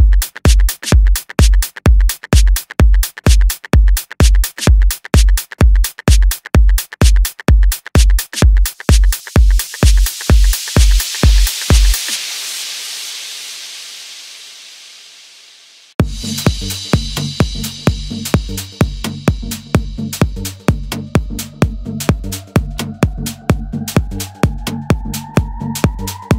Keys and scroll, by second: 4.7 ctrl+-, 5.2 ctrl+-, 14.8 ctrl+z.